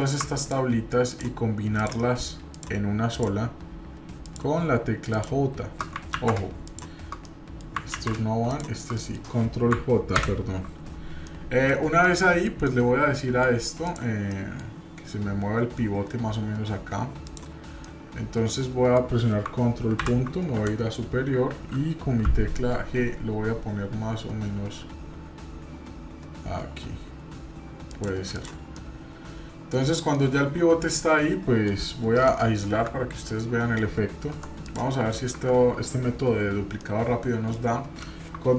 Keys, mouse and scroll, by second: 0.4-0.9 shift+drag, 1.1-1.6 shift+drag, 6.2 ctrl+z, 6.6-7.1 shift+drag, 7.2 middle click, 8.0 ctrl+z, 8.5-8.9 shift+drag, 8.9-9.2 middle drag, 10.5 ctrl+j, 11.2-11.7 middle drag, 11.8 scroll down 1, 12.0-12.5 middle drag, 12.7-13.4 middle drag, 13.8 click, 14.3 middle click, 17.2 click, 17.8-19.0 middle drag, 19.9 ctrl+., 20.5 KP_7, 22.3 g, 28.3 click, 28.7-29.9 middle drag, 30.1-31.8 middle drag, 33.2 middle click, 34.3 Tab, 34.6 click, 35.3 Tab, 36.8-37.6 middle drag.